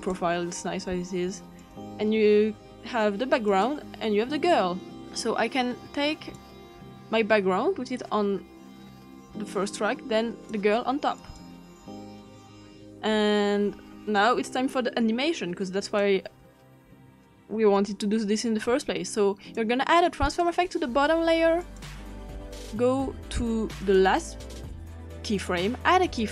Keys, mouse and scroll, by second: 0.0 click, 1.6 click, 3.5 click, 5.0-6.4 drag, 9.1-10.6 drag, 11.2 click, 12.7-14.9 ctrl+scroll up 4, 14.9 scroll up 1, 15.9 click, 17.3-19.6 drag, 20.3 click, 21.7 click, 23.8 click, 26.1 click.